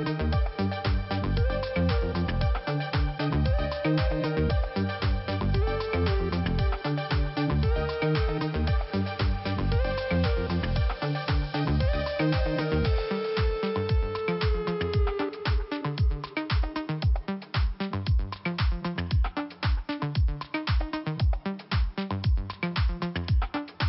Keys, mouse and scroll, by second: 1.6 click, 2.5-3.6 scroll down 2, 4.1 click, 5.6 scroll up 2, 7.8 click, 8.6 click, 9.9 click, 10.0 click, 12.2 click, 13.4 click, 14.9 click, 15.0 click, 15.7 click, 18.5 click, 19.5 click, 21.3 click.